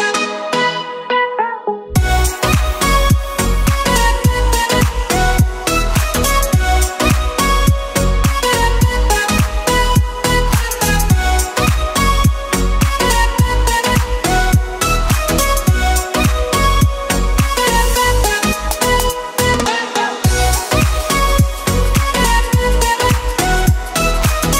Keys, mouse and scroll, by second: 0.1 click, 1.8 click, 3.6 click, 7.7 click, 10.0 KP_0, 13.1 click, 14.2 KP_1, 14.8 scroll down 3, 15.4 click, 17.2-17.9 scroll up 1, 17.9 scroll up 2, 18.0 click, 19.5 click, 20.6 KP_0, 22.1 click, 22.6 click.